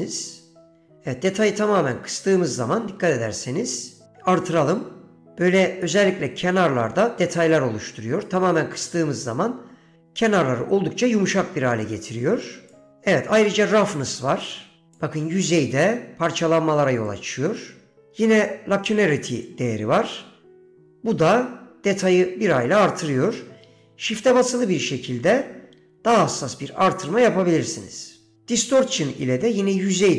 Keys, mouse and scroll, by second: 4.5 click, 7.6 click, 12.0 click, 13.5-15.1 drag, 17.2-18.2 drag, 19.6-28.4 drag, 29.1-30.1 shift+drag.